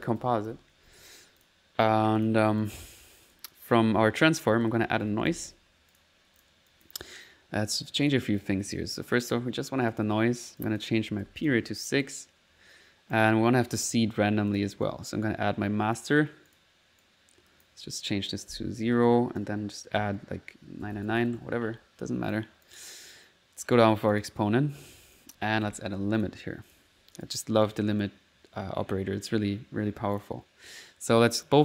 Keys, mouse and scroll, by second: 0.0-1.0 typing, 1.5 click, 1.8 click, 2.2 click, 2.7 click, 3.1 click, 4.7 middle click, 4.8-6.0 typing, 6.0 click, 6.5 click, 8.1 click, 8.7 click, 9.1 click, 9.9 click, 10.6 click, 11.8 middle click, 12.1 click, 13.2 click, 13.6 click, 14.5 click, 14.9-16.1 drag, 16.5 click, 17.0 click, 22.3 click, 23.1 middle click, 23.8 click, 24.2 click, 25.1 right click, 25.4-26.2 typing, 26.2 click, 26.7 click, 27.0 middle click, 27.3 click, 27.7 click, 30.2 click, 31.4 click.